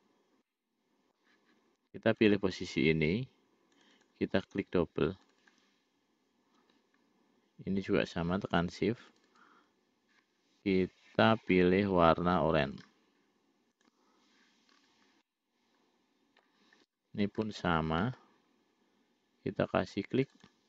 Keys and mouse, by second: 0.8 middle click, 2.7 click, 4.1 click, 5.6 click, 9.5 shift+click, 13.1 click, 14.1 click, 15.6-16.9 middle drag, 17.8 middle click, 20.5-20.6 drag.